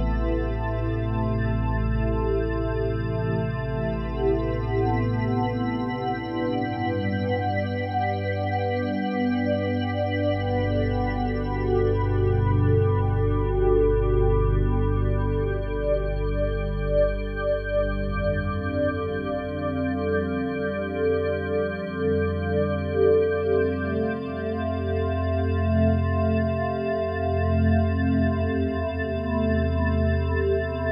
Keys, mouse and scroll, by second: 3.8-7.2 drag, 7.2 z, 10.5-13.2 drag, 13.3-17.5 drag, 17.5-17.8 typing, 19.6-21.5 alt+shift+drag, 21.5 typing, 23.3 shift+click, 24.4 typing, 25.3 shift+click, 26.1-29.7 ctrl+alt+drag, 29.7 Delete, 30.0-30.9 typing, 30.0-30.9 drag.